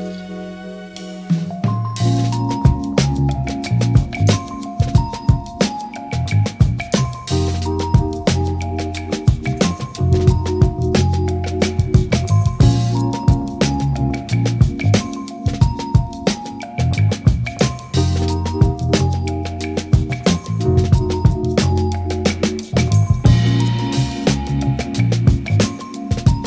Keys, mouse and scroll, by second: 0.1 ctrl+middle click, 0.3 click, 0.9 click, 0.9 middle click, 1.2 middle click, 1.3 click, 1.5 click, 1.8 click, 2.1 click, 2.3 click, 2.4 click, 2.7 middle click, 2.7 click, 2.9 ctrl+z, 2.9 middle click, 2.9 click, 3.0 middle click, 3.1 click, 3.2 middle click, 3.2 click, 3.4 click, 3.7 middle click, 3.9 click, 4.1 middle click, 4.2 click, 4.3 click, 4.4 middle click, 4.5 click, 4.7 click, 5.2 middle click, 5.4 ctrl+z, 5.5 click, 5.6 middle click, 5.8 ctrl+z, 6.2 click, 6.4 middle click, 6.9 click, 7.3 click, 7.8 middle click, 7.9 click, 8.1 middle click, 8.2 click, 8.3 click, 8.8 ctrl+middle click, 8.9 ctrl+alt+Page_Down, 9.0 middle click, 9.0 click, 9.3 ctrl+middle click, 9.6 middle click, 9.7 middle click, 9.8 middle click, 9.9 click, 10.2 click, 10.4 click, 10.5 middle click, 10.6 click, 10.7 click, 10.8 middle click, 10.9 click, 11.0 ctrl+z, 11.1 middle click, 11.2 click, 11.7 ctrl+z, 12.0 click, 12.4 middle click, 12.6 click, 12.7 middle click, 12.8 click, 12.9 click, 13.1 click, 13.3 click, 13.4 middle click, 13.5 click, 13.8 click, 14.1 middle click, 14.4 click, 14.6 middle click, 14.6 click, 14.8 middle click, 14.9 ctrl+click, 15.5 middle click, 15.7 click, 16.2 ctrl+middle click, 16.3 click, 16.4 middle click, 16.4 ctrl+z, 16.5 click, 16.6 click, 16.8 middle click, 16.8 click, 17.0 click, 17.3 ctrl+z, 17.5 middle click, 17.6 middle click, 17.6 click, 17.7 middle click, 18.2 ctrl+z, 18.2 click, 18.3 middle click, 18.4 click, 18.5 click, 18.8 click, 18.9 middle click, 19.0 click, 19.2 click, 19.5 shift+middle click, 19.6 ctrl+alt+Page_Up, 20.0 middle click, 20.3 click, 20.4 middle click, 20.4 scroll up 2, 20.5 middle click, 20.6 shift+middle click, 21.0 middle click, 21.3 click, 21.4 middle click, 21.8 click, 22.0 ctrl+middle click, 22.2 shift+click, 22.2 middle click, 22.3 KP_1, 22.7 middle click, 22.8 ctrl+click, 22.9 middle click, 23.0 ctrl+click, 23.0 middle click, 23.1 ctrl+z, 23.2 ctrl+click, 23.2 middle click, 23.8 click, 24.0 click, 24.2 click, 24.4 f, 24.5 middle click, 24.6 click, 24.7 ctrl+z, 24.8 click, 24.8 ctrl+z, 25.0 click, 25.1 middle click, 25.2 click, 25.3 middle click, 25.5 click, 25.7 middle click, 25.8 click, 26.0 ctrl+middle click.